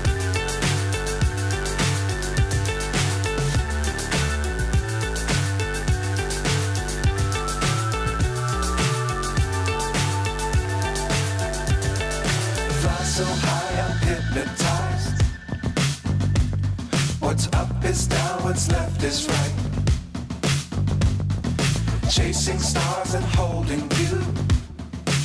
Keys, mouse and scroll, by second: 4.5 click, 6.3-9.7 drag, 11.4 click, 11.9 click, 12.9-13.7 drag.